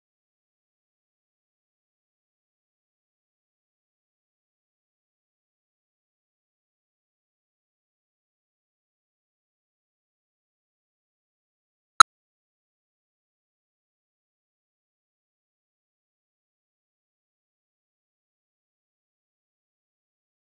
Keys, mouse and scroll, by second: 0.1 drag, 0.4-0.8 shift+middle drag, 0.8 Home, 1.8 z, 5.8 click, 6.2 z, 6.4 middle click, 6.4-6.7 scroll down 11, 6.7 click, 7.0 KP_0, 7.3 click, 7.8 z, 8.1-12.6 drag, 12.6 z, 12.9-15.2 drag, 15.2 KP_0, 15.3 KP_0, 15.5 middle click, 15.6 scroll down 8, 15.8 middle click, 15.9 scroll up 2, 15.9 middle click, 16.1 z, 16.9 click, 17.3-20.1 typing, 17.7 click, 18.8 click, 19.8 click.